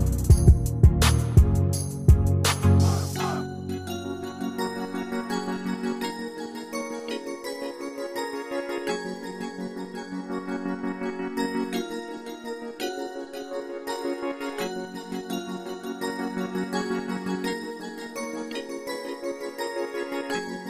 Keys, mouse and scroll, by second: 2.9 Escape.